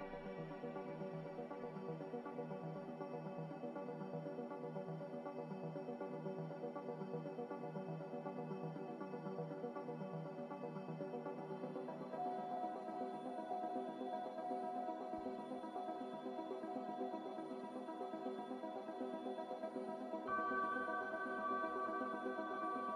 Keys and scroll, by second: 0.6 a, 20.8 z.